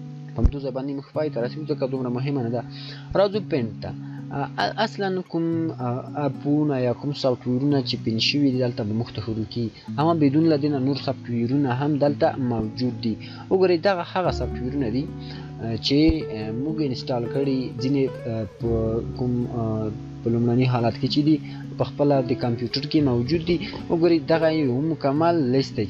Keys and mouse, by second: 11.6 shift+click, 15.5 shift+click.